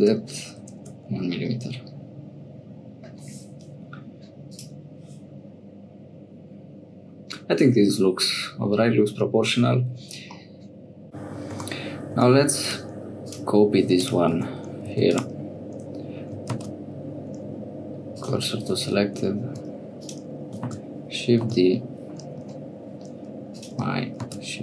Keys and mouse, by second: 4.5 click, 10.4 click, 11.5 Tab, 12.1 Tab, 12.6 click, 13.2 click, 14.0 click, 14.4 Tab, 14.8 2, 15.1 click, 16.5 shift+s, 19.6 Tab, 19.9 click, 20.6 shift+d, 24.2 shift+s.